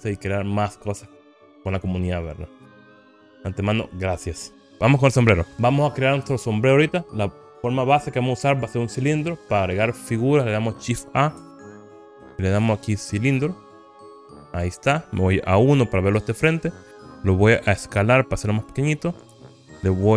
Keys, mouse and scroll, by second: 5.5 Delete, 11.9 shift+a, 15.8 KP_1, 18.0 s, 19.7 click.